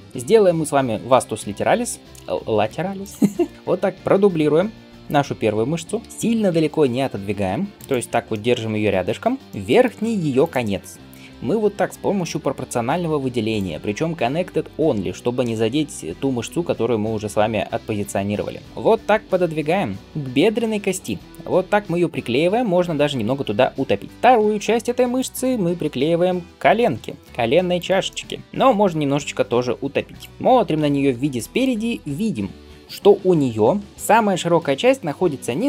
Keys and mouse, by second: 0.0-2.0 middle drag, 3.1-10.3 middle drag, 3.5 l, 5.9 shift+d, 6.3 g, 10.3 click, 10.4-13.6 middle drag, 13.6-21.0 drag, 18.7 g, 21.0-31.6 middle drag, 22.5 g, 25.7 g, 28.4 g, 30.3 KP_1.